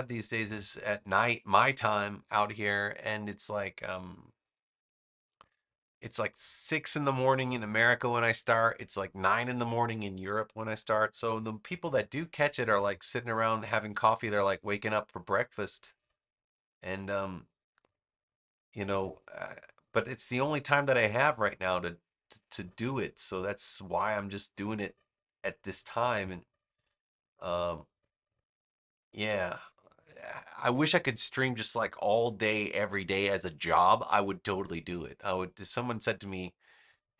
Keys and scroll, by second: 14.0 v.